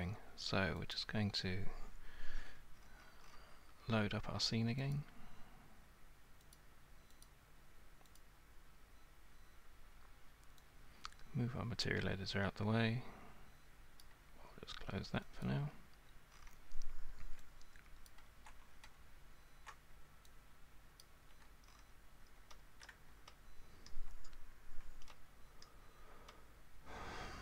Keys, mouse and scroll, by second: 0.9 click, 2.5-3.4 scroll, 5.0 click, 6.6 click, 7.3 click, 8.2 click, 14.0 click, 15.4 click, 16.3 scroll, 18.1 alt+click, 21.0 ctrl+click, 21.7 scroll, 22.5-23.2 shift+scroll, 23.3 super+scroll, 23.9 super+scroll, 25.1 alt+scroll, 25.6-26.2 alt+scroll, 26.3 alt+scroll, 26.3 alt+scroll down 1, 26.8 alt+scroll down 1, 27.0 alt+scroll up 1, 27.1 alt+scroll down 1, 27.2 alt+scroll up 1.